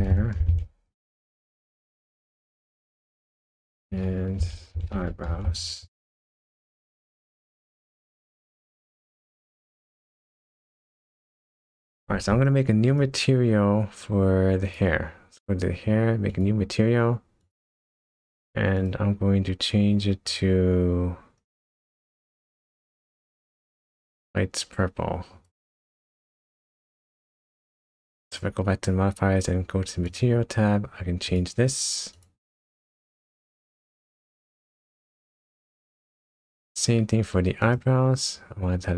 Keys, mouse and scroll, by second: 2.1 click, 2.3 click, 8.0 click, 10.5 click, 12.9 click, 14.6 click, 16.3 click, 17.4 click, 18.7 click, 26.5 click, 28.2 click, 30.0 click, 32.1 click, 37.6 click.